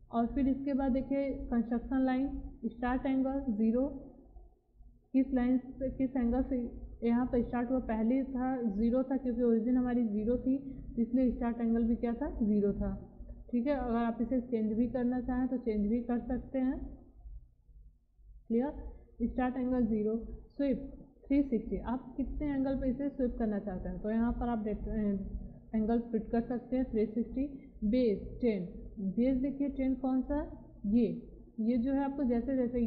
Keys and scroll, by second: 12.3 0, 14.6 0, 18.0 0.